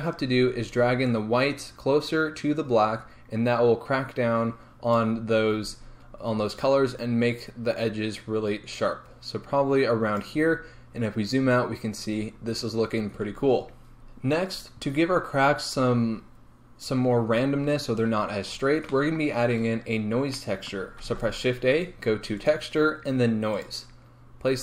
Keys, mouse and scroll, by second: 1.1-24.6 drag, 5.6-7.4 scroll up 2, 10.5-11.4 scroll down 2, 11.4-13.1 scroll up 2.